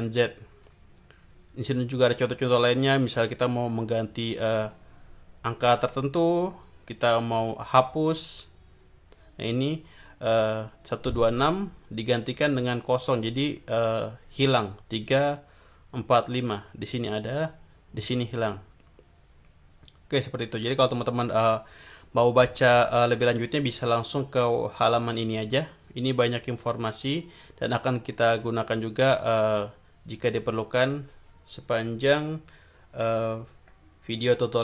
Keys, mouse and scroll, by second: 1.7 scroll down 1, 11.0 click, 12.8 click, 20.2-20.6 scroll down 1, 23.9 scroll up 1, 24.9-25.8 scroll up 5.